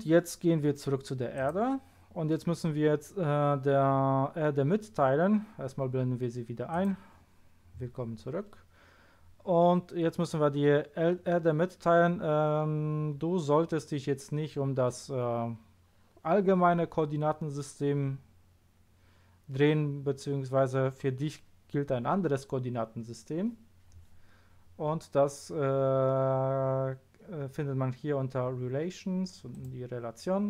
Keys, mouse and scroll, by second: 1.3 click, 6.7 click, 8.7-29.5 scroll down 1, 29.5 click.